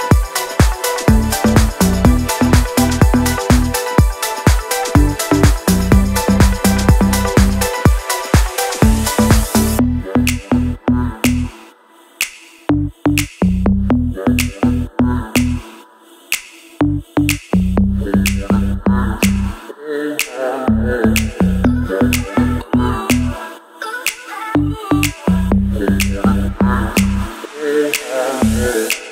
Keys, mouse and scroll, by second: 3.2-6.0 alt+drag, 6.0-8.5 drag, 8.5-14.2 alt+drag, 14.6-15.0 scroll down 1, 15.0 click, 15.3-17.0 scroll up 1, 17.0 click, 17.8-20.9 drag, 20.9 ctrl+z, 22.1 ctrl+shift+z, 22.8 click, 23.9 Right, 26.6 click, 27.2-27.6 scroll down 1, 27.6-28.2 scroll up 1.